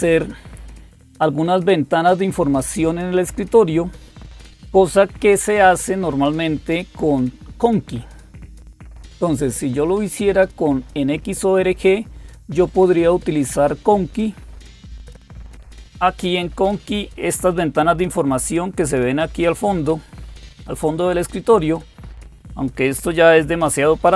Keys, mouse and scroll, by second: 0.5-4.0 scroll down 1, 9.1 click, 14.0 click, 18.0 click.